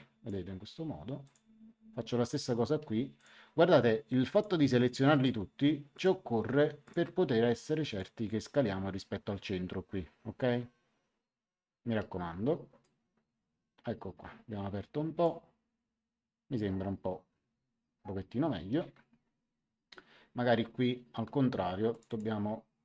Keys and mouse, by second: 1.2 click, 3.1 ctrl+click, 4.3 ctrl+click, 7.8 ctrl+click, 12.8 click, 21.9 click.